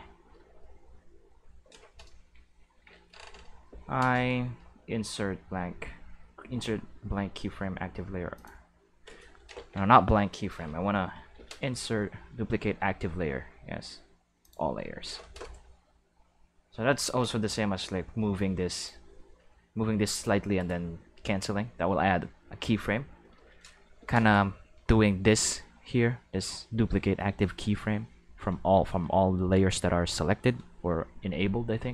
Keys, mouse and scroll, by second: 0.3 i, 2.1 a, 3.7 i, 8.3 click, 9.5 ctrl+z, 11.3 i, 14.4 click, 17.5 g, 18.8 right click, 19.3 g, 23.9 i.